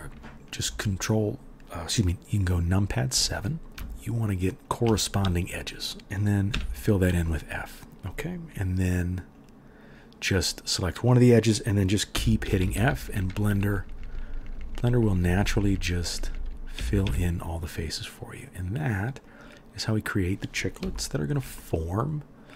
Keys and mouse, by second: 3.7 2, 6.5 f, 9.3 middle click, 9.3 right click, 12.1-17.0 typing.